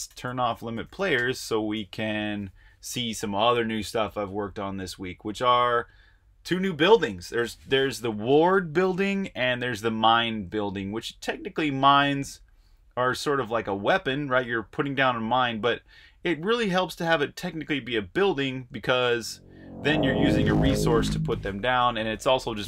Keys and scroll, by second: 0.0-2.9 typing, 22.3-22.6 typing.